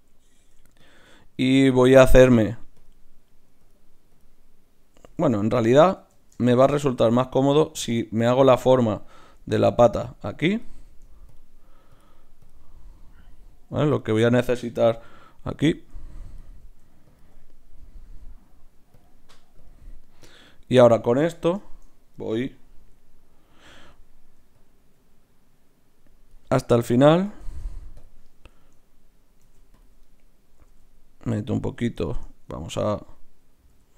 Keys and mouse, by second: 0.4 ctrl+Tab, 2.8-6.4 drag, 5.2 ctrl+z, 5.4 ctrl+z, 6.0 ctrl+z, 6.0 right click, 6.4-7.6 middle drag, 7.6-14.2 drag, 7.6-9.1 right drag, 15.0 g, 16.3-22.0 drag, 20.4-24.4 right drag, 21.2 middle click, 24.4 d, 24.5-30.6 drag, 27.4 shift+q, 29.4 ctrl+r, 30.6 s, 32.0-33.9 middle drag, 33.7 g.